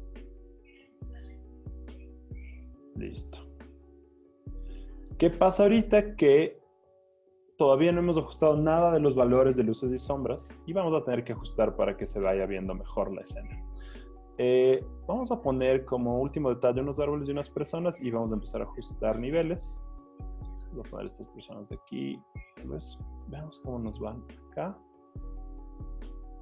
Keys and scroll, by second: 3.0 z, 4.5 z, 12.7 z, 13.8 z, 14.7 z, 20.6 v, 23.0 super+t.